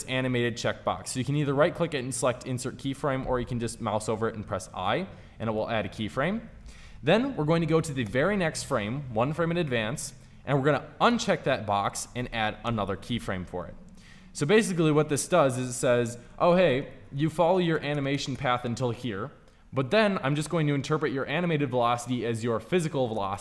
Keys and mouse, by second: 1.2-4.0 right drag, 4.0 i, 7.9 Right, 12.5 i, 15.4 Left, 15.5 Left, 15.9 Left, 16.0 Left, 16.4 Left, 16.6 Left, 17.0 Right, 17.2 Right, 17.6 Right, 17.8 Right, 18.2 Right, 21.2 Right, 23.0 Right.